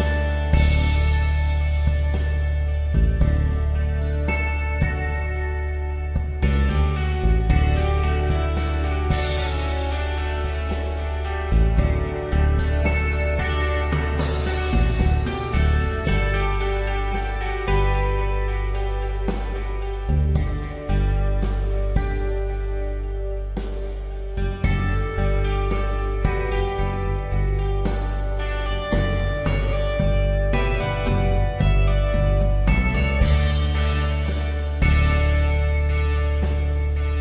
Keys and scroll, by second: 2.7 space, 4.7 e, 7.2-9.9 typing, 11.7 space, 16.5 p, 21.1 space, 23.1 ctrl+Return, 23.8 space, 26.3 Delete, 28.5 ctrl+d, 29.0 space, 35.3-36.2 typing.